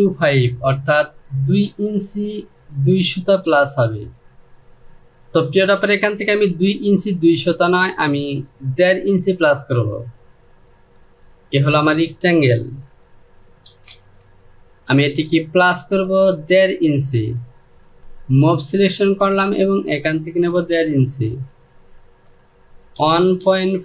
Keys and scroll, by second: 13.3 shift+f, 22.6 KP_1, 23.1 KP_Decimal, 23.5 KP_5.